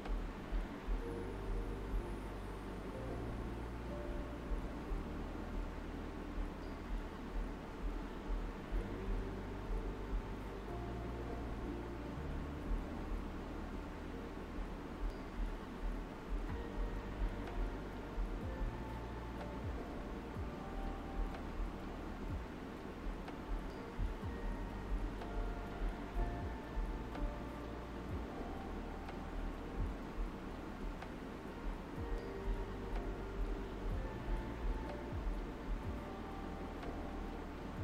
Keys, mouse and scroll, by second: 1.8-11.8 drag, 11.8 typing, 12.3 alt+right click, 14.6 alt+right click, 15.7 space, 15.9 click, 16.2 space, 17.3-21.1 drag, 21.1 alt+right click, 23.5-24.8 typing, 25.0 click, 26.1 shift+click, 27.6 shift+click, 28.5 alt+right click, 28.9 typing, 29.8 alt+right click, 31.0 alt+right click, 31.7 shift+click, 32.7 alt+right click, 34.0 alt+right click, 35.8-37.0 typing, 36.9 alt+right click.